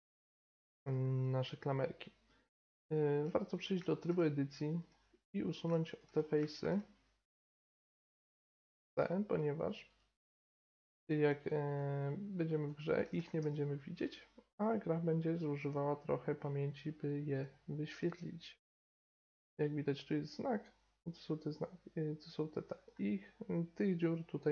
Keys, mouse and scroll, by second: 0.8-1.3 middle drag, 2.6 Tab, 4.8 click, 5.5-9.4 drag, 5.5-7.9 right drag, 6.2-7.9 middle drag, 8.6 middle click, 8.6-14.6 right drag, 13.2 x, 17.3-19.9 drag, 19.5 middle click, 20.4 click, 20.9 middle click.